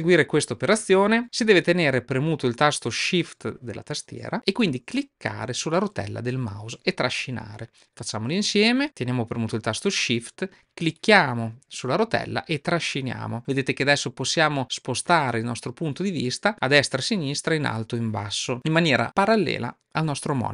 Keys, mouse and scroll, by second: 10.9-20.5 shift+middle drag.